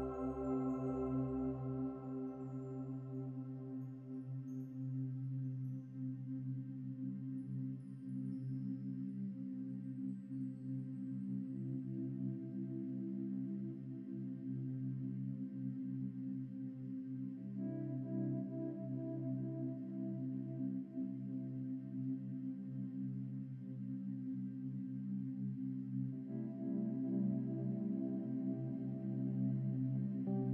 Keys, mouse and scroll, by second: 1.3-3.5 shift+middle drag, 3.5 click, 3.9 middle click, 4.8 e, 8.4 ctrl+r, 10.3-10.7 scroll up 3, 10.8-12.2 middle drag, 12.2 ctrl+b, 14.8 3, 15.3-16.5 right drag, 17.0-17.7 scroll down 9, 17.7 Tab, 17.9 scroll up 4, 18.1 middle click, 18.8-20.3 drag, 20.3 Tab, 20.7 Tab, 20.9-21.3 scroll down 4, 22.9 KP_0, 26.5-29.0 drag, 29.5-30.5 scroll up 1.